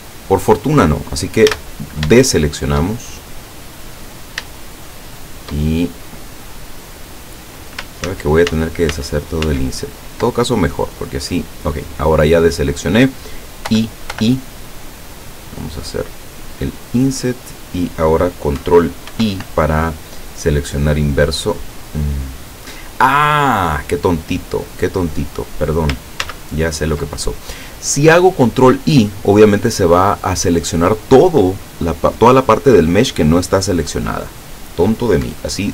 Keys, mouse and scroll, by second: 0.4 shift+scroll down 3, 1.5 a, 2.3 shift+middle click, 3.1 shift+middle click, 4.0-4.6 scroll up 3, 4.6-5.6 shift+middle drag, 5.9 shift+scroll up 2, 6.9 right click, 8.1 ctrl+z, 10.6-11.6 ctrl+scroll down 7, 11.8-12.4 scroll up 2, 12.6 scroll up 2, 13.7 i, 17.6 click, 19.2 ctrl+i, 19.7-20.6 ctrl+scroll down 5, 21.2-21.5 scroll up 2, 22.4 scroll down 2, 22.8-23.5 scroll up 4, 23.5 scroll down 2, 23.8-24.5 scroll up 4, 24.7-25.0 scroll down 2, 26.3 ctrl+z, 28.4-29.1 scroll down 2.